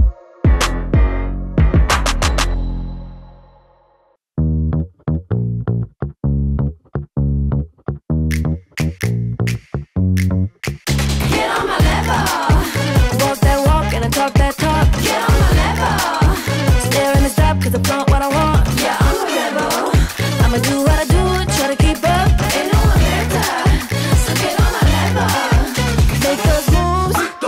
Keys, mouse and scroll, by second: 0.0-10.2 shift+drag, 4.5-5.4 shift+drag, 8.5-9.8 shift+drag, 12.0 space, 17.2-19.3 drag, 23.1-23.6 click, 23.5 space.